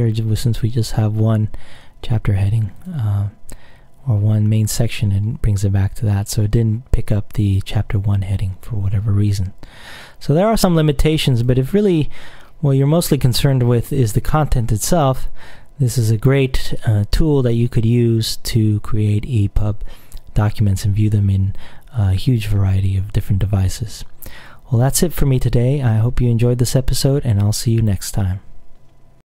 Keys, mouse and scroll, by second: 2.9 click, 5.4-5.9 scroll down 2, 5.9-6.7 scroll up 2, 6.8-7.3 scroll down 2, 11.6 click, 12.1-13.8 scroll down 1, 13.8 scroll up 1, 14.1-14.5 scroll down 1, 15.8-17.0 scroll down 2.